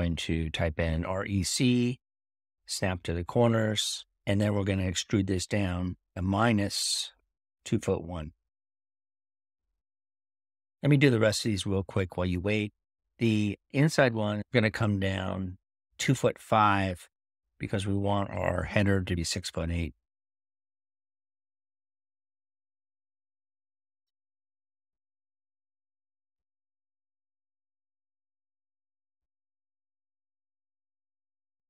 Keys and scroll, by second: 1.4-2.2 typing, 5.2-6.0 typing.